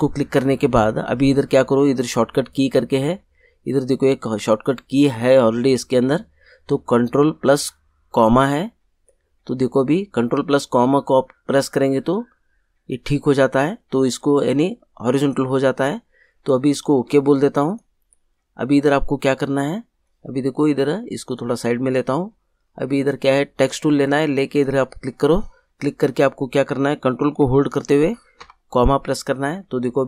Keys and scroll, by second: 28.3 ctrl+,.